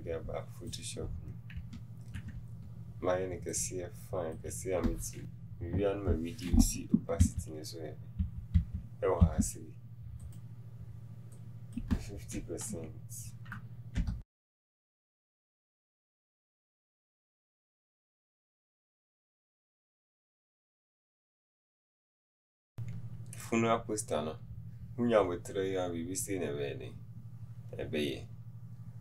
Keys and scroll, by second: 12.8 KP_5, 12.8 KP_6.